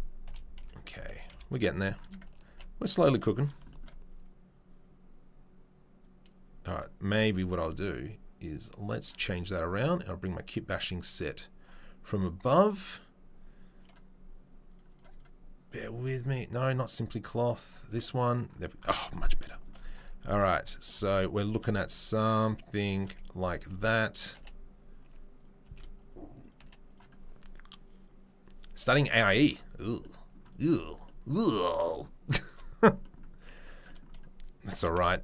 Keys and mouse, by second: 0.2 KP_3, 0.6 KP_1, 0.9 ctrl+click, 1.3 ctrl+KP_3, 1.5-6.0 middle drag, 2.5 g, 6.0-14.8 right drag, 14.8-15.2 middle drag, 15.2-20.8 right drag, 20.3 s, 20.8-33.5 middle drag, 20.9 g, 23.6 s, 24.3 g, 25.6 s, 26.6 g, 33.5 right click, 33.6-35.2 middle drag, 34.7 g.